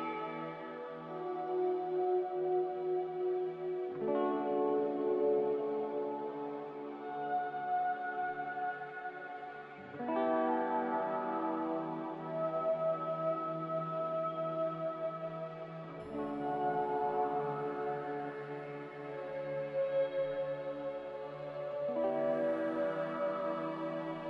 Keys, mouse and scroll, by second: 0.2 z, 2.1-2.9 typing, 7.7-8.5 typing, 11.1-11.8 typing, 16.8-17.6 typing, 20.3 a, 21.5 z, 23.8-24.2 typing.